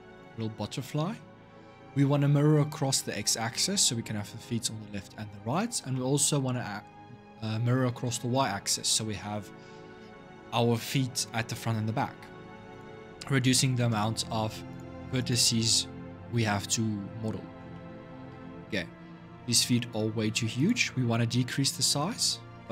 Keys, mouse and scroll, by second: 2.1-2.5 scroll down 3, 2.5-5.5 middle drag, 5.7-8.7 middle drag, 9.0-12.0 middle drag, 12.5 click, 14.5 click, 14.9 click, 17.5-20.3 middle drag, 20.3 click, 21.0 scroll up 2.